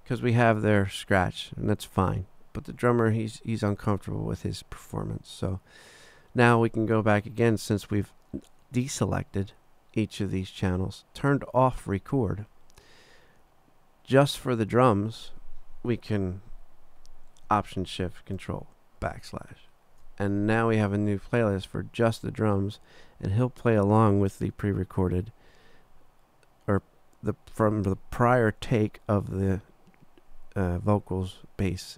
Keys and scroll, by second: 19.0 ctrl+alt+shift+\.